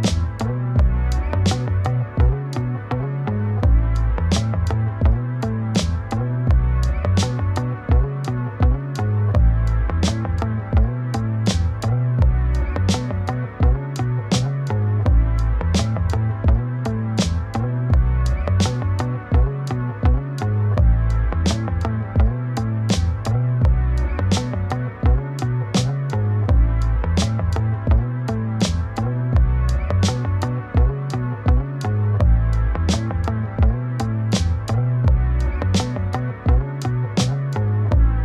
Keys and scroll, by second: 30.1 ctrl+space.